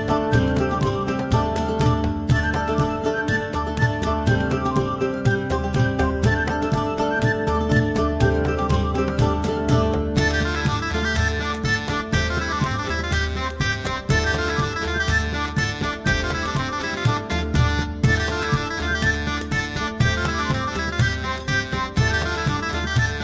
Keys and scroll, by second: 0.2 ctrl+w, 8.2 KP_1, 10.8 KP_Enter.